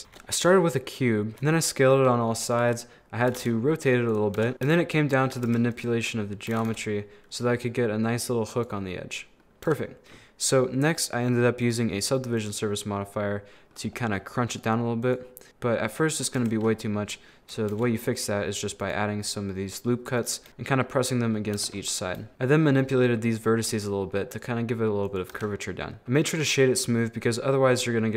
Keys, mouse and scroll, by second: 0.0 middle click, 0.0 shift+a, 1.3 s, 3.3 r, 4.4 Tab, 4.5 middle click, 4.7 3, 5.4 2, 5.7 right click, 6.1 middle click, 6.5 g, 8.9 middle click, 9.7 Tab, 11.0 click, 11.6-12.8 drag, 12.8-13.9 middle drag, 13.9-15.1 scroll up 2, 15.1 click, 15.5 ctrl+r, 16.9 middle click, 17.7 ctrl+r, 20.5 Tab, 20.5-21.6 middle drag, 21.6 Tab, 21.8 middle click, 25.4 Tab, 25.7-26.7 middle drag, 26.7-27.8 scroll up 1, 27.9-28.1 scroll up 3.